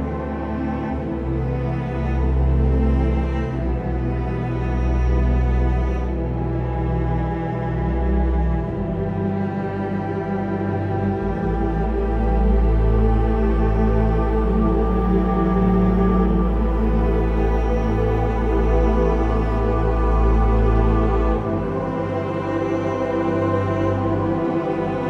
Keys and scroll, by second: 0.7 ctrl+i, 2.7-3.4 typing, 10.8 ctrl+z, 10.9 x, 17.7 ctrl+d, 18.7 v, 22.4 ctrl+o, 24.8 ctrl+o, 24.9 ctrl+shift+i.